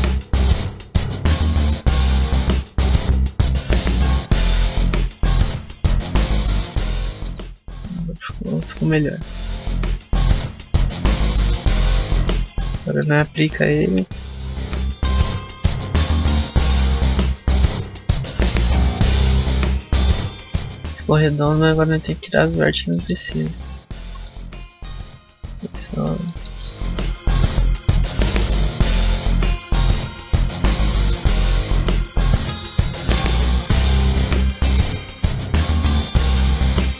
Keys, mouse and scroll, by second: 5.9 scroll up 1, 6.2 middle click, 6.6 scroll up 1, 7.0 shift+middle click, 7.2 middle click, 11.4 Tab, 11.8 middle click, 12.3 Tab, 12.6 shift+middle click, 17.1 click, 18.1 middle click, 18.3 Tab, 18.7 middle click, 22.1 shift+middle click, 22.4 scroll up 2, 22.8 middle click, 23.7 alt+right click, 24.1 x, 25.8 a, 26.1 shift+middle click, 26.8 alt+right click, 27.7 alt+right click, 28.3 x, 29.2 scroll down 3, 29.4 shift+middle click, 29.7 middle click, 29.9 scroll up 2, 30.7 alt+right click, 31.4 alt+right click, 31.9 alt+right click, 32.3 alt+right click, 32.7 x, 33.2 shift+middle click, 33.5 scroll up 1, 34.1 shift+middle click, 34.9 alt+right click, 35.3 x, 36.2 alt+right click, 36.6 x.